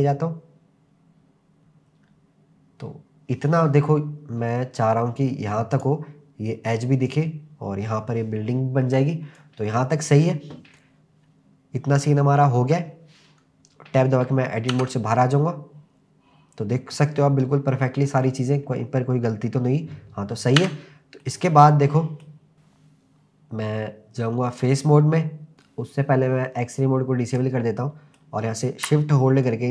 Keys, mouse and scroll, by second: 5.8 click, 9.4 click, 14.7 Tab, 17.2-17.8 scroll up 3, 18.0-20.4 scroll down 3, 20.6 Tab, 21.2-22.2 middle drag, 24.6 click, 27.3 click, 27.8-28.9 middle drag, 29.4-29.7 shift+drag.